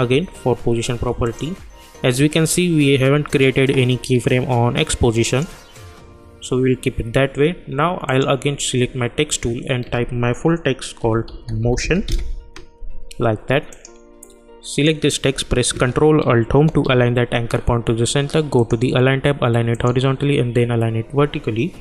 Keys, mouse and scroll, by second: 1.2 click, 5.3 click, 8.0 click, 10.7-12.5 typing, 13.7 click, 16.6 ctrl+alt+Home, 18.6 click.